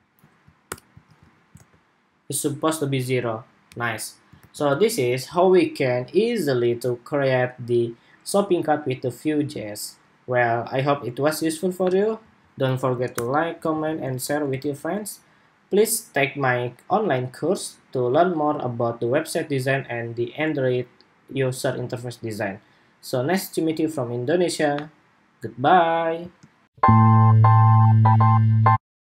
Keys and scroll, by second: 0.5 super+/, 0.7 super+s, 1.1 super+Tab, 1.3 super+r, 4.1 super+r, 12.8 super+/, 13.6 super+s, 13.8 super+Tab, 14.4 super+r, 26.4 shift+super+2.